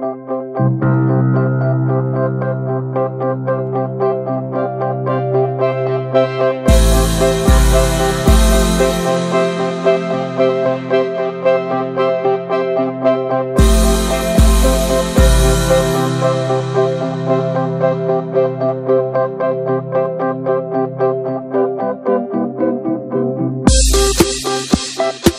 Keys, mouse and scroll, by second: 0.5 2, 0.8 shift+middle click, 1.2 alt+shift+click, 2.0 ctrl+b, 2.8 scroll down 6, 3.1 drag, 3.3 middle drag, 3.4 scroll up 1, 3.5-4.2 shift+middle drag, 4.2-4.9 scroll up 4, 4.4 shift+middle click, 4.5 Tab, 4.7 middle click, 4.9 shift+middle click, 5.7 2, 5.8 click, 6.5 middle click, 8.3-9.4 drag, 9.4 ctrl+b, 11.3 scroll down 3, 11.4-11.9 middle drag, 11.9 ctrl+s, 12.0 click, 12.2 shift+middle drag, 12.8 ctrl+a, 13.0 scroll down 1, 13.2-13.6 shift+middle drag, 13.6-14.1 scroll up 2, 13.8 shift+middle drag, 14.1 middle drag, 14.3 ctrl+s, 14.3 middle click, 14.5-14.8 scroll up 1, 14.8-15.4 shift+middle drag, 15.4 ctrl+s, 15.6 drag, 15.8 shift+middle click, 16.4-18.7 drag, 18.7 middle drag, 18.9 scroll up 1, 19.0-19.4 shift+middle drag, 19.4 ctrl+click, 20.0 middle drag, 20.2 scroll down 1, 20.3-21.4 middle drag, 21.4 ctrl+s, 21.6 ctrl+middle click, 21.9 ctrl+s, 23.9 click, 24.6-25.3 drag.